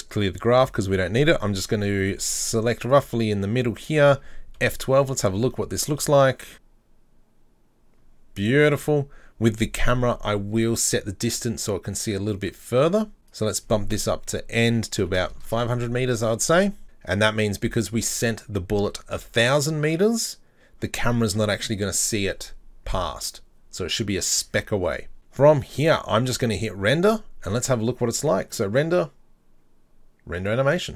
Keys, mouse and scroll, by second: 0.0-4.8 drag, 0.8-2.9 scroll up 1, 4.8 F12, 15.5 KP_0, 27.6 click.